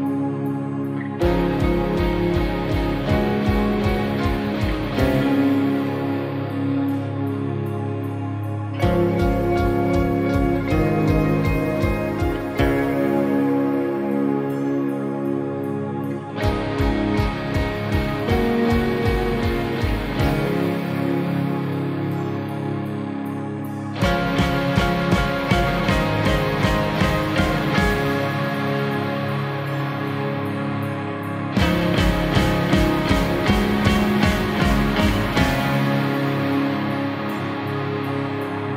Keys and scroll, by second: 1.8 ctrl+-, 2.9 ctrl++, 6.2 space, 9.7 space, 12.7 space, 14.5 ctrl+-, 18.8 space, 19.9 space, 22.5 space, 25.6 space, 26.2 space, 31.7 space, 38.6 space.